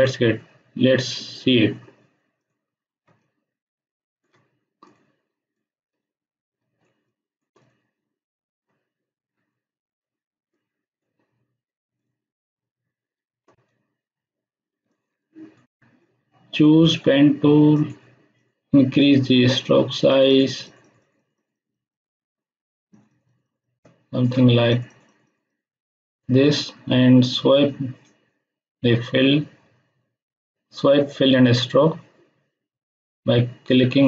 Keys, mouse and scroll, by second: 2.4 click, 2.9 space, 3.2-4.4 ctrl+drag, 3.9-7.7 ctrl+drag, 5.4-7.3 space, 10.5-11.1 shift+drag, 12.9 space, 14.1-14.7 scroll down 2, 14.7 space, 14.8-15.8 ctrl+drag.